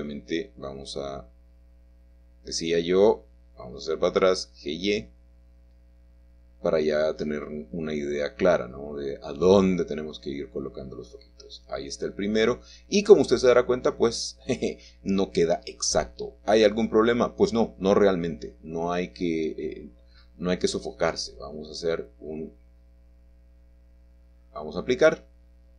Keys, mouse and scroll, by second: 0.0 c, 2.1 Escape, 4.6 g, 8.2 click, 10.0 middle click, 13.7-14.7 drag, 15.9 middle click, 16.7-17.5 scroll down 1, 17.5-18.7 scroll up 1, 18.8-19.7 scroll down 1, 24.7 click.